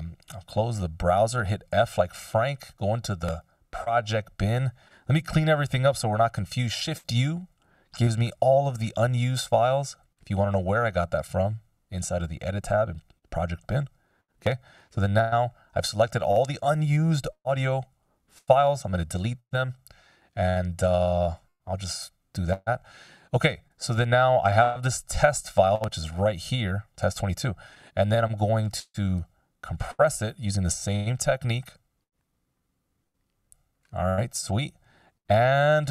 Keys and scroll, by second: 0.1 o, 1.8 f, 6.7 shift+u, 18.5 BackSpace, 30.4 F16.